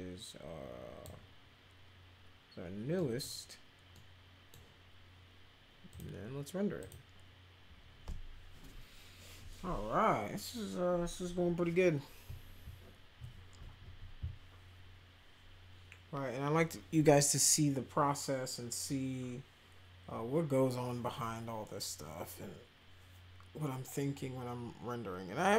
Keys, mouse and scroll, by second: 2.9 middle click, 3.9 middle click, 5.9 click, 6.8 click.